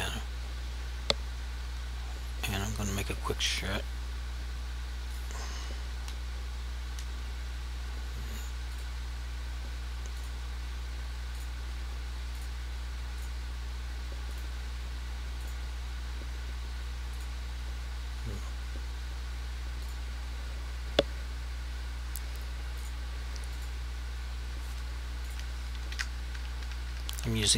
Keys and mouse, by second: 0.0 click, 5.2 click, 8.8 click, 19.9 click, 26.0 Down.